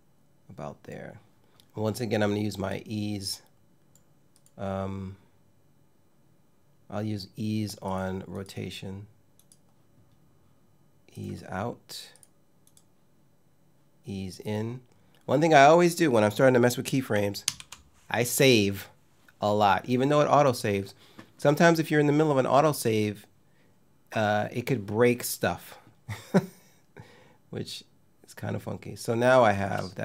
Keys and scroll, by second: 17.1 super+s, 29.2 space.